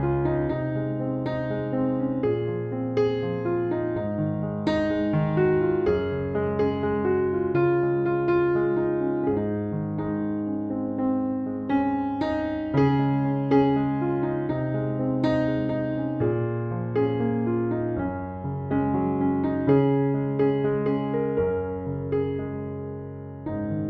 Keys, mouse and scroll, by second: 1.0 click, 2.7 click, 5.3-6.4 drag, 7.3 click, 9.7-11.0 drag, 11.8-13.2 drag, 14.8 click, 15.8 right click, 18.7 right click, 19.3 click, 20.0 a, 21.1 Left, 22.3 Right, 23.0 Left.